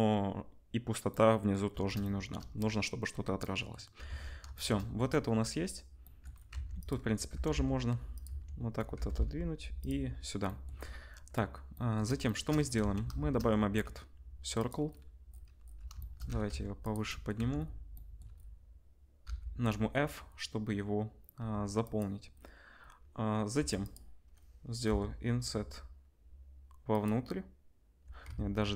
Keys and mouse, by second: 4.1 ctrl+s, 6.5 Tab, 6.8 middle click, 6.9-12.4 drag, 7.3 g, 8.2 Tab, 8.9 g, 12.8 ctrl+s, 13.1 shift+a, 15.6 drag, 16.2 g, 17.3 Tab, 19.2 f, 21.3 1, 21.8 middle click, 23.5 3, 23.8 middle click, 24.8 i, 28.3 ctrl+z.